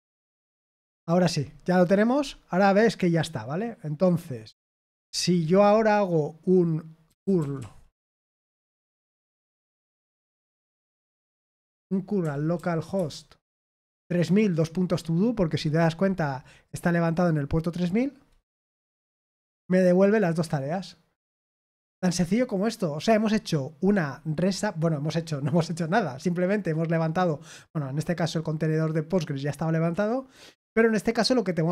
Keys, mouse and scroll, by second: 0.0-1.7 typing, 0.6 Return, 5.1 ctrl+l, 6.8-8.0 typing, 9.6-10.5 typing, 11.6-12.9 typing, 13.6 Right, 16.6 click, 17.7 click, 18.5 Return.